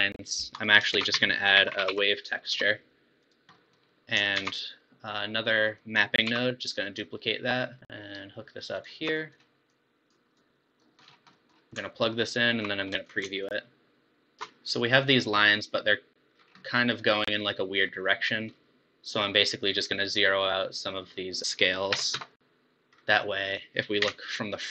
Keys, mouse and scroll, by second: 0.5 click, 1.0 shift+a, 3.6 middle click, 3.8 scroll down 1, 4.4 shift+a, 5.7 click, 6.4 shift+d, 7.8 middle click, 8.2-9.2 alt+right drag, 9.2-9.7 middle drag, 9.7 click, 10.4 click, 11.2 scroll up 5, 11.4-12.0 middle drag, 12.0-13.7 alt+right drag, 13.7 ctrl+shift+click, 15.0-16.4 middle drag, 16.4 scroll down 5, 16.6-18.2 middle drag, 18.2-18.9 scroll up 7, 21.4-23.4 drag, 23.4 middle click, 24.0 KP_1.